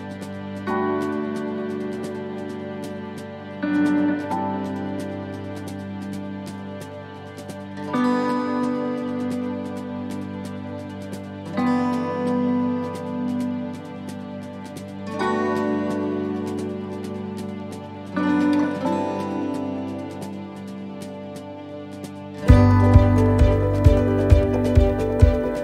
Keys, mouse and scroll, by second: 1.2 shift+right click, 1.7 shift+right click, 2.2 shift+right click, 4.0 shift+right click, 5.8 shift+right click, 6.3 shift+right click, 6.8 shift+right click, 7.0 shift+right click, 7.5 shift+right click, 7.8 shift+right click, 8.4 middle click, 9.2 shift+middle click, 9.7-10.3 scroll up 9, 10.8 shift+right click, 11.3 shift+right click, 11.8 shift+right click, 12.5 middle click, 12.8-13.1 scroll down 7, 13.4 middle click, 13.7-14.2 scroll down 4, 14.4 shift+scroll up 1, 14.6 shift+middle click, 15.2-16.0 shift+scroll down 5, 16.8 f, 17.4 middle click, 17.9 shift+middle click, 18.5 scroll up 5, 18.8 middle click, 19.6-20.1 scroll up 3, 20.5 right click, 21.1 alt+shift+right click, 22.2 right click, 23.1 ctrl+z, 23.6 alt+shift+right click, 24.3 middle click, 24.7 scroll down 6, 25.1 shift+middle click.